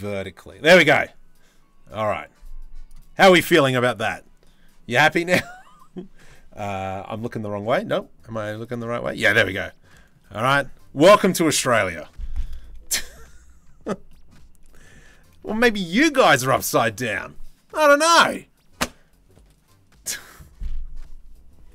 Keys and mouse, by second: 12.6 shift+middle click, 13.7 middle click, 14.3 shift+middle click.